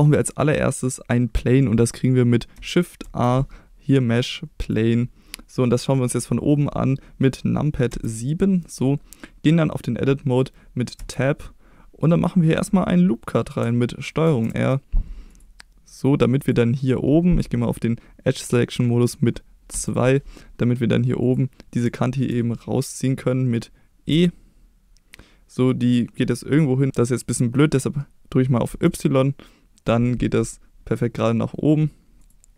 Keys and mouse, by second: 0.0 middle click, 3.0 shift+a, 5.6-6.1 middle drag, 7.9 KP_7, 10.9 Tab, 14.2 ctrl+r, 16.3 click, 19.7 2, 21.2 click, 21.9 middle click, 24.1 e, 28.6 y, 32.2 click.